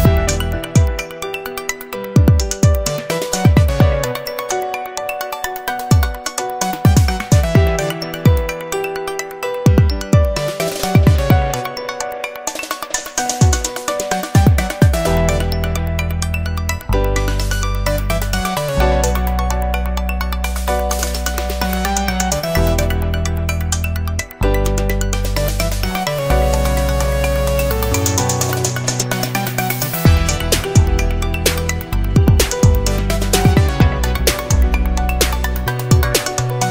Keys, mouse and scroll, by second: 1.2-2.9 drag, 4.2-8.5 drag, 10.2 0, 11.3 click, 12.6 click, 13.9 click, 14.6 click, 16.8 Escape, 18.1 right click, 18.7 Escape, 20.2 click, 23.2 click, 25.1 1, 25.4 click, 26.5 1, 27.0 5, 27.4 click, 31.7-34.6 drag, 34.8 click, 36.2 1.